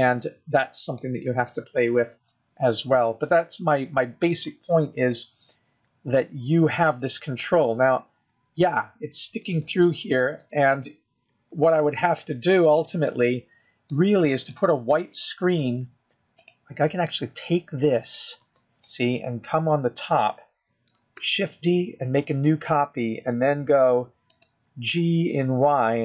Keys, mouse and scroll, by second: 2.0-2.8 scroll up 1, 2.8-3.4 scroll down 3, 3.4 middle click, 4.9-5.4 scroll up 4, 5.7 middle click, 7.1 scroll down 1, 7.5 scroll up 2, 9.6 middle click, 13.7 g, 15.5 middle click, 16.5-16.9 scroll down 4, 16.9 middle click, 18.8 click, 20.6 middle click, 22.0 KP_7, 23.6 shift+d.